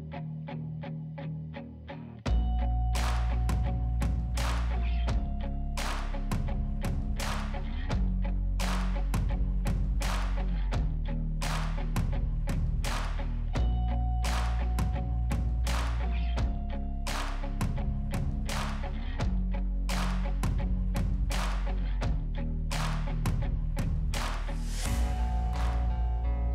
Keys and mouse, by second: 1.7 right click, 1.8 right click, 11.8 right click, 22.5 right click.